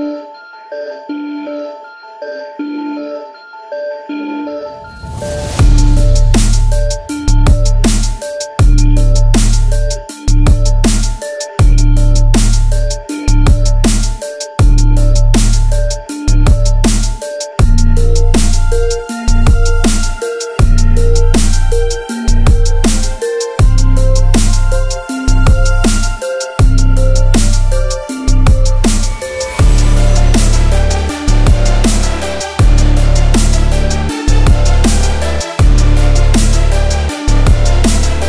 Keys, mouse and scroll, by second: 0.6 middle click, 0.9 a, 1.9 click, 2.3 click, 3.7 alt+click, 10.2 click, 12.7 alt+click, 13.5 alt+click, 22.4 alt+click, 25.1 click, 25.9 click, 28.0 alt+click, 31.5 alt+click, 34.9 alt+click, 38.1 click.